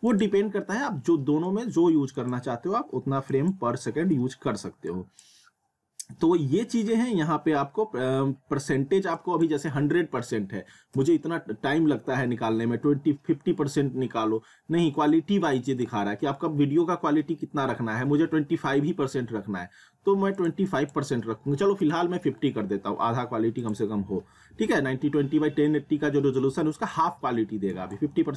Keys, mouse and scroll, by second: 0.1-7.7 drag, 9.2 click, 15.5 click, 20.4 click, 23.6 click, 26.8 click.